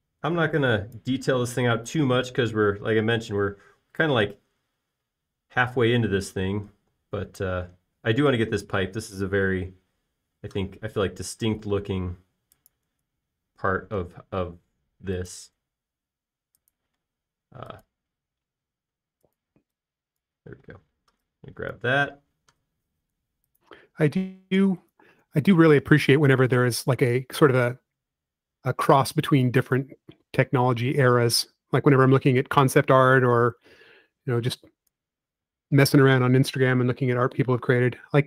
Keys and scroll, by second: 1.3 typing, 2.6 typing, 11.0 l, 18.6-19.2 typing, 20.6 typing, 21.9 typing, 32.1 space, 34.0 f, 36.5 p.